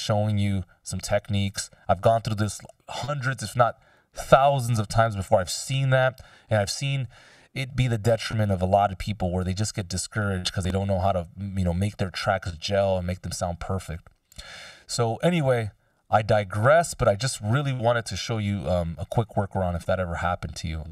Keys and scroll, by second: 18.7 Delete, 20.3 BackSpace.